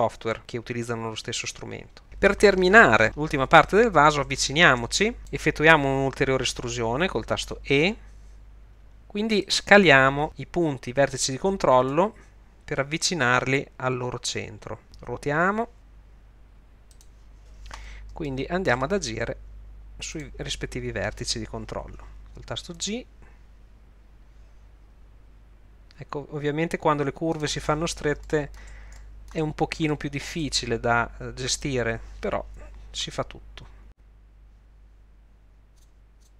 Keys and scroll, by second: 7.8 e, 11.9 s, 15.4 r, 22.8 g, 33.0 g.